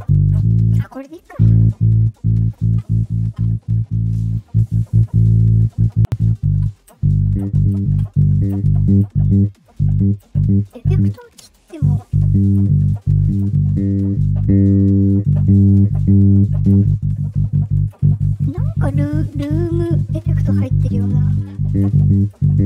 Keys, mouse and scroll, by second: 1.8-2.5 drag, 4.2 click, 5.4 click, 11.4 click.